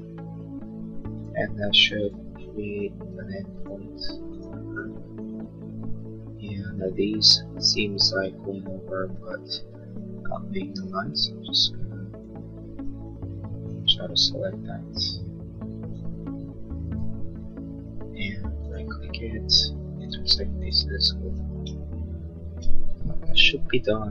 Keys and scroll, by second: 9.4 space, 10.3 space, 23.2 l.